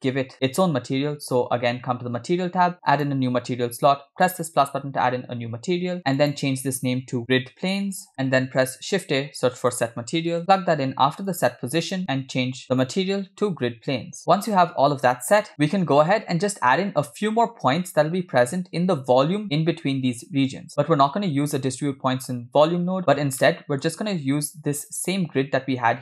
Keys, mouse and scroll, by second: 2.9 click, 4.3-4.7 drag, 6.2-8.1 drag, 8.7 shift+a, 12.4-12.7 scroll up 2, 12.7-14.2 drag, 14.7-15.4 scroll down 6, 15.4 middle click, 23.4 middle click, 25.0-26.0 drag.